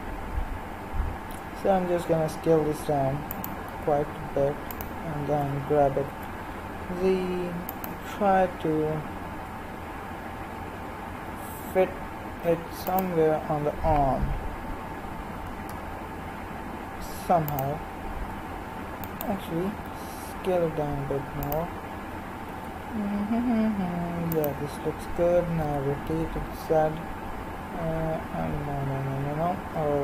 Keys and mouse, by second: 2.1 s, 4.2 s, 5.4 g, 9.3 r, 15.3 g, 18.3 g, 19.8 s, 22.1 g, 25.7 r.